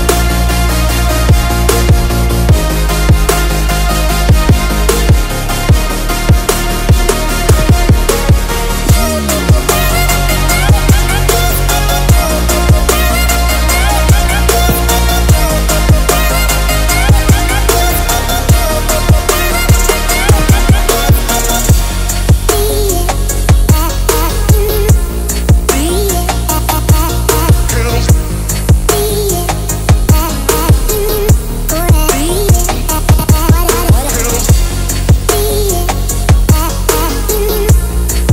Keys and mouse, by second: 1.1 click, 2.9 click, 3.9 click, 4.6 middle drag, 5.6 KP_7, 6.1 click, 6.7-7.9 drag, 9.0 click, 9.6 click, 10.8 shift+middle click, 13.6 g, 15.8 ctrl+r, 19.4 ctrl+r, 26.7 KP_1, 27.9 shift+click, 29.3 shift+click, 30.1 shift+click, 31.2 ctrl+r, 33.9-34.8 drag, 35.0 Tab, 35.3 drag, 36.3 w, 37.6-38.2 middle drag.